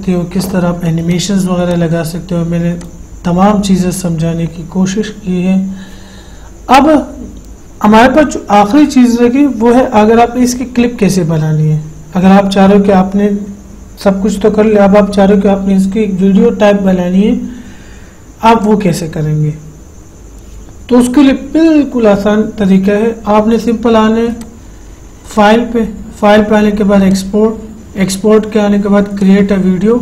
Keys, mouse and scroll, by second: 1.4 click, 24.8 click, 29.5 click.